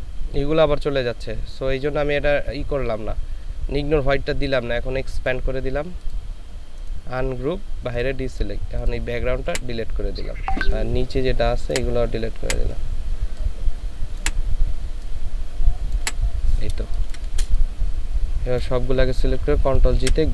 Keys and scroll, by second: 9.5 Delete, 16.8 ctrl+space, 19.9 ctrl+g.